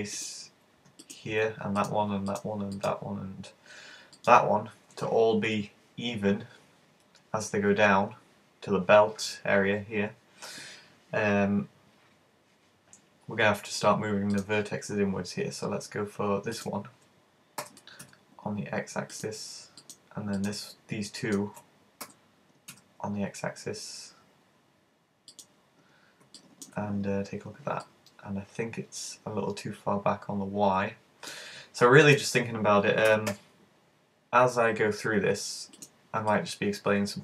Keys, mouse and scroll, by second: 0.3 click, 1.1 right click, 1.8 shift+right click, 2.4 right click, 2.8 shift+right click, 4.2 shift+right click, 14.4 click, 16.6 right click, 17.6 g, 19.2 click, 19.9 right click, 20.4 right click, 21.2 shift+right click, 22.1 g, 25.5 click, 25.8-26.2 scroll up 3, 26.4 shift+middle click, 27.3 scroll down 5, 27.9 middle click, 32.1 shift+right click, 33.1 shift+super+g, 35.9 click, 36.3 middle click.